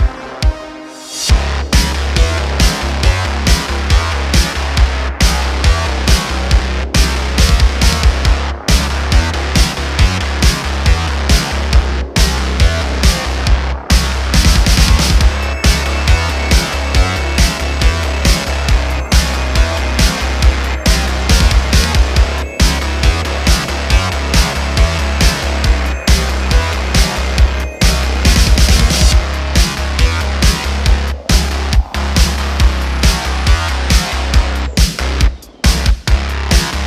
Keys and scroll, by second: 5.2 Tab, 5.5 super+r, 7.0 super+r, 7.6 3, 14.2 2, 15.8 s, 28.0 3, 32.3 Tab.